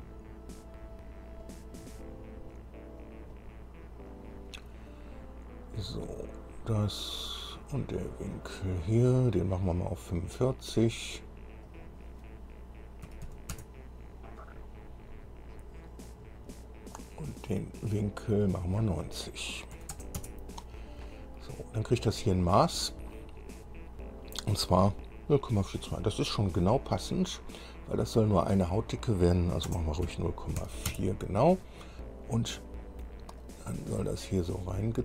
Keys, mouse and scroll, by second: 1.6 click, 3.2 click, 3.6 right click, 4.3 click, 6.3 click, 7.7 click, 8.6 click, 11.9 click, 13.3 KP_4, 13.5 KP_5, 13.8 KP_Enter, 16.2 click, 16.9 click, 18.6 click, 20.0 KP_9, 20.2 KP_0, 20.4 KP_Enter, 22.6 click, 23.8 click, 29.9 KP_0, 30.3 KP_Decimal, 30.8 KP_4, 33.6-35.0 drag.